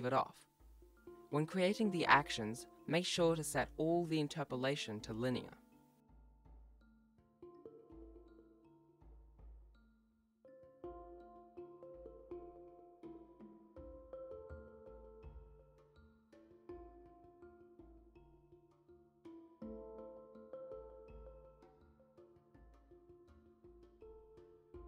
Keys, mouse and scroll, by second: 0.0 shift+right click, 0.2 i, 0.7 click, 1.2 x, 1.4 i, 1.7 click, 2.1-2.4 scroll up 3, 2.2 shift+middle click, 2.4 g, 2.6 right click, 2.7 g, 3.1 i, 3.6 ctrl+z, 3.9 shift+right click, 4.0 alt+g, 4.1-8.2 typing, 4.3 click, 5.2 click, 5.5 right click, 6.3 right click, 6.5 right click, 7.2 right click, 8.7 click, 9.8 right click, 10.1 Left, 10.3-15.0 typing, 10.7 click, 10.9 scroll down 1, 11.8 right click, 12.4 right click, 12.8 right click, 13.1 shift+right click, 13.2 shift+right click, 13.6 click, 14.0 alt+g, 14.3 right click, 14.5 click, 15.4 click, 21.0 click, 22.5 right click, 24.4 click.